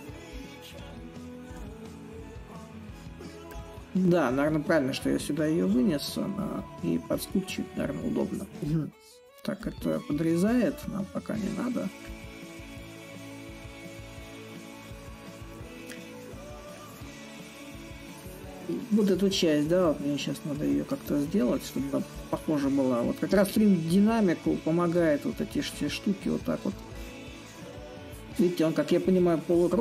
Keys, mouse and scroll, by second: 0.0-5.0 drag, 5.3-10.3 drag, 11.1-16.1 drag, 16.4-21.4 drag, 21.8-26.8 drag, 27.1-29.8 drag.